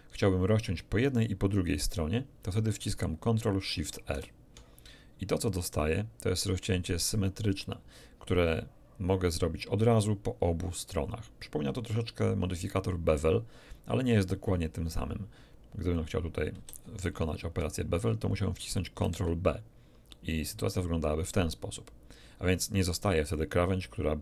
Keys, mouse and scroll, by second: 4.0 ctrl+shift+r, 15.8 click, 16.5 a, 17.0 alt+shift+click, 19.0 ctrl+b.